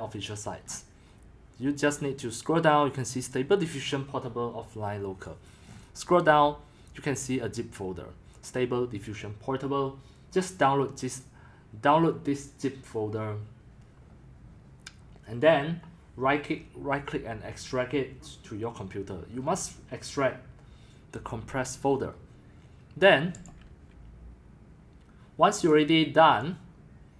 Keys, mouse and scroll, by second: 0.6 scroll, 1.6 scroll, 1.8-5.2 middle drag, 5.2-5.6 drag, 5.6-6.2 middle drag, 5.6-6.1 scroll, 6.2-7.2 scroll down 9, 10.0-10.3 scroll down 1, 10.3-11.1 scroll, 23.5-25.7 drag.